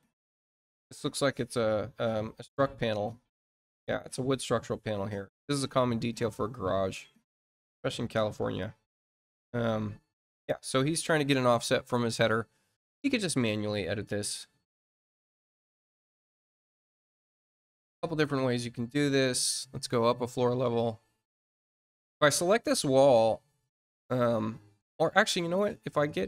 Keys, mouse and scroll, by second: 5.8 scroll down 2, 6.3 scroll down 2, 7.2-7.7 scroll up 2, 12.6 click, 20.5 click, 22.0 click.